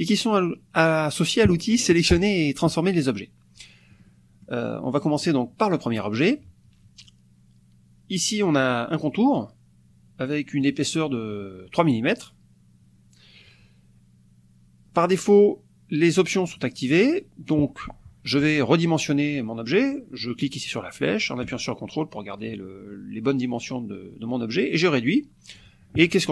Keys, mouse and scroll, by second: 4.1 click, 5.0 click, 6.0 click, 10.6 click, 16.7 click, 20.4-25.8 drag.